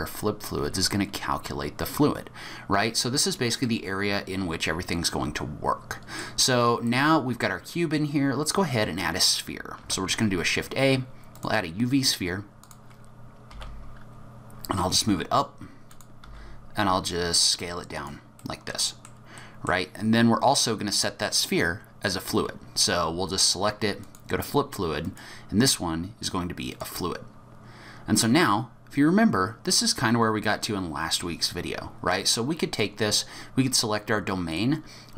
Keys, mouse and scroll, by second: 3.6 middle click, 6.9 middle click, 7.9-9.5 scroll up 1, 9.8 shift+a, 12.6 click, 13.5 g, 16.2 s, 18.4 middle click, 19.4 middle click, 24.0 click, 25.0 click, 32.7 click, 34.5 click.